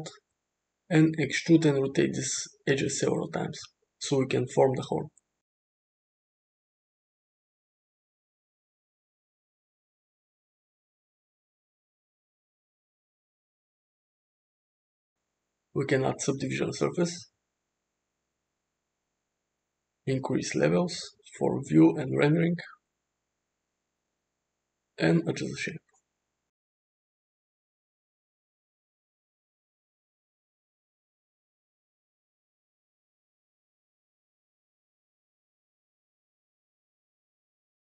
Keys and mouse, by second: 0.6 alt+z, 1.2-2.0 drag, 3.3 e, 3.3 s, 4.8 r, 5.7 e, 6.8 s, 8.4 r, 9.7 e, 10.8 r, 11.6 s, 13.3 e, 14.6 r, 15.4 s, 16.0 Tab, 17.9-19.9 drag, 23.3 Tab, 24.3 click, 25.3 s, 26.8 Tab, 27.3 g, 29.2-29.6 drag, 29.7 g, 31.8 drag, 32.1 g, 33.2 s, 34.7 click, 35.0 s, 35.7 g, 36.5 Tab, 36.7 click, 37.6 shift+middle click.